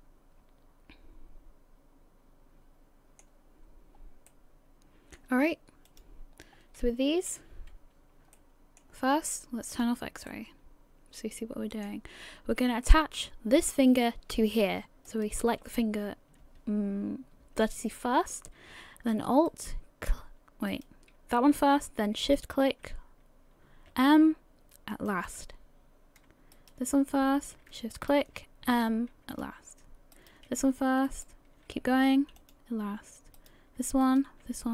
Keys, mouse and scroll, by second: 3.7-4.3 scroll up 1, 4.3 middle click, 5.9 click, 6.4 scroll up 1, 7.2 a, 7.4 a, 8.4 middle click, 9.7 click, 10.3 middle click, 11.3 middle click, 11.3 click, 12.4 scroll up 2, 12.8 shift+middle click, 15.1 right click, 19.5 alt+right click, 20.7 right click, 22.2 shift+right click, 25.5 m, 26.6 right click, 27.9 shift+right click, 28.7 m, 30.2 right click, 31.1 shift+right click, 32.0 m, 33.4 right click, 34.0 shift+right click.